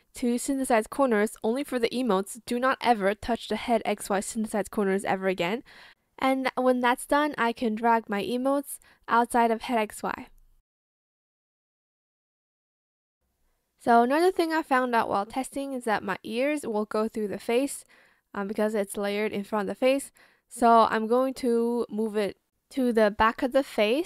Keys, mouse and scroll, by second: 2.5 Return, 7.0 Return.